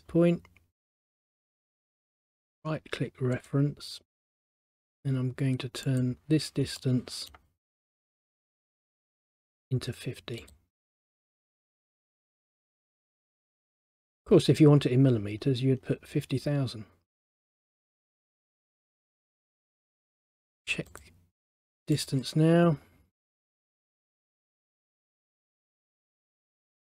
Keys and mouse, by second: 1.2 click, 2.3 right click, 3.4 click, 6.0 click, 6.9 middle click, 8.9 click, 10.5 click, 18.0 middle click, 19.7 middle click, 21.0 click, 22.1 click, 24.2 click, 25.1 middle click, 26.8 click.